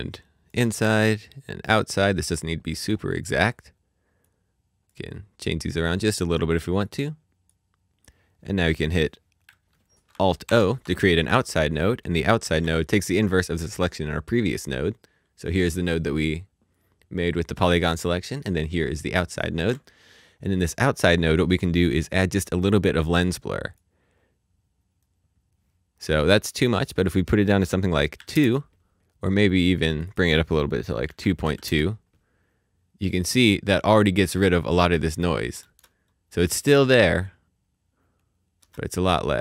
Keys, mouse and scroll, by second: 15.1 click, 18.2 click, 19.5 shift+h, 20.8 click, 22.6 click, 26.8 click, 28.1 KP_2, 28.3 KP_Enter, 29.4-30.5 scroll up 1, 30.5 click, 31.0 KP_2, 31.4 KP_2, 31.6 KP_Enter, 32.7-33.2 scroll up 1, 33.2 middle click, 35.6 middle click, 35.6 space, 38.6 space.